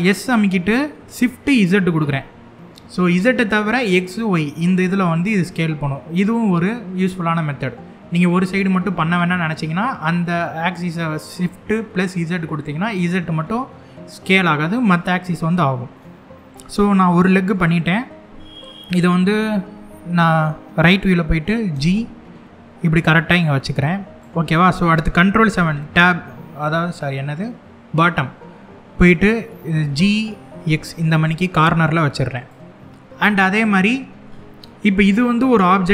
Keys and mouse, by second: 1.7 shift+z, 13.9 click, 14.6 middle click, 15.6-17.0 middle drag, 18.9 KP_3, 21.4 g, 25.1 ctrl+KP_7, 29.5 g, 30.3 x, 32.0 click, 33.3 middle click, 34.2 middle click.